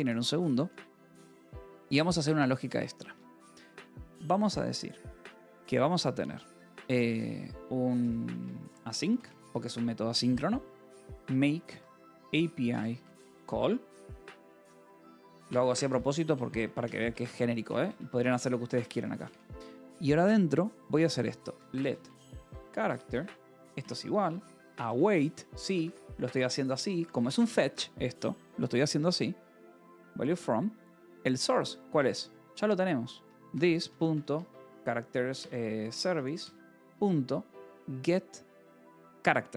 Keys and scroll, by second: 0.1-1.8 typing, 2.3 Return, 3.5-5.1 typing, 6.9 Escape, 7.0-13.4 typing, 14.7-18.7 typing, 19.2 Return, 21.1-28.2 typing, 29.5 Return, 31.5 Escape, 31.9-35.3 typing, 34.6 Return, 36.3 Return, 36.6 ..